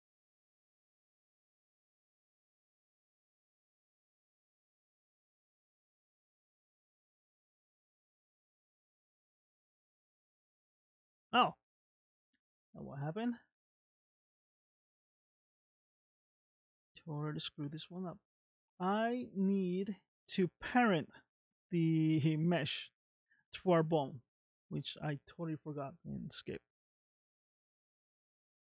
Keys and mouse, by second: 1.7 click, 3.0 space, 4.0 space, 5.0 space, 7.4 space, 7.8 middle click, 8.6 space, 10.1 space, 11.5 click, 13.1 middle click, 14.1 middle click, 28.0 click.